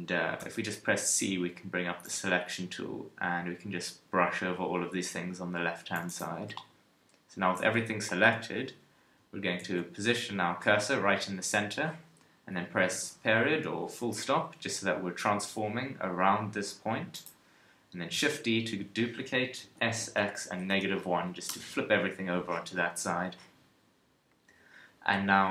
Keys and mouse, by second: 0.4 c, 6.3 z, 8.2 KP_1, 9.6 shift+c, 12.9 ., 14.4 r, 17.2 click, 18.1 shift+d.